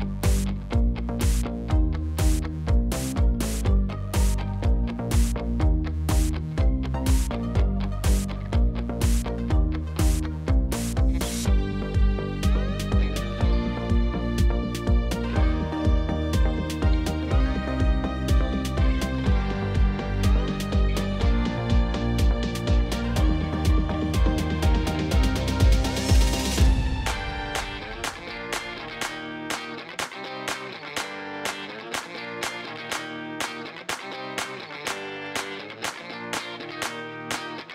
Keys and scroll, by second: 14.6-15.7 typing, 16.0 Return, 18.9 shift+a, 20.1 i, 20.3 m, 20.4 a, 37.1 n.